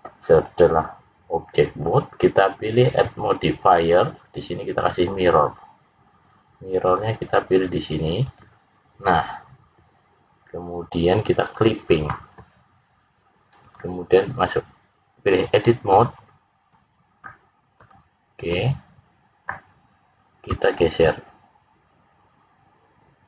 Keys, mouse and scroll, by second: 1.7 click, 2.8 click, 6.8 click, 11.4 click, 13.7 click, 15.9 click, 16.6 click, 17.7 click, 18.4 click, 20.9 click.